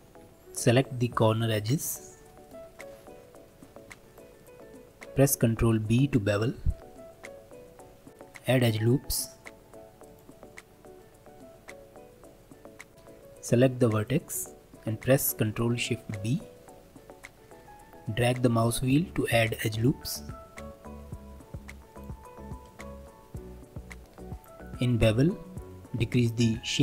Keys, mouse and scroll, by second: 0.2 2, 1.6 click, 2.4 shift+click, 2.7 shift+click, 3.1-4.1 middle drag, 4.1 shift+click, 4.4 shift+click, 4.5-5.9 shift+middle drag, 5.9 ctrl+b, 8.1-12.9 drag, 12.9 middle click, 13.5 1, 14.0 click, 14.5-16.1 shift+middle drag, 16.1 ctrl+shift+b, 22.3-22.8 scroll up 2, 22.8 shift+middle click, 23.6-26.8 drag.